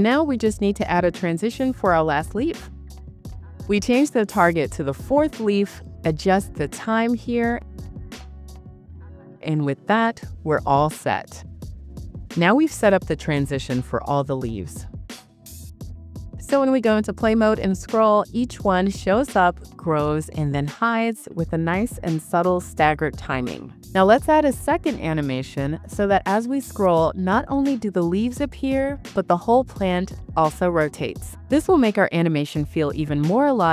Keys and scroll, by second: 8.5 BackSpace, 8.9 6, 9.7 Return.